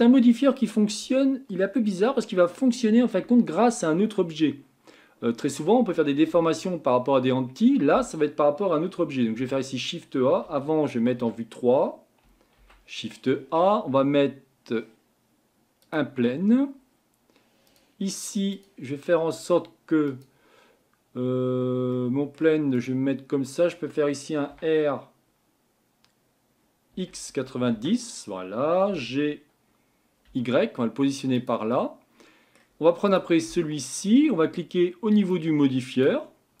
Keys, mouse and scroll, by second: 28.9 g, 33.4-35.3 scroll down 2, 35.3-36.6 drag.